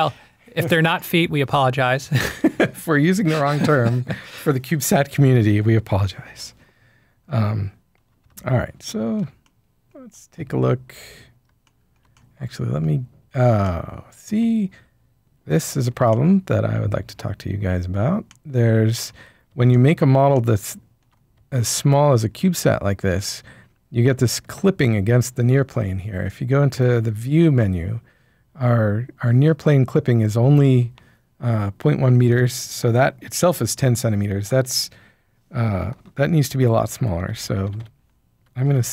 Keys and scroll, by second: 8.2 typing, 36.9-38.9 typing.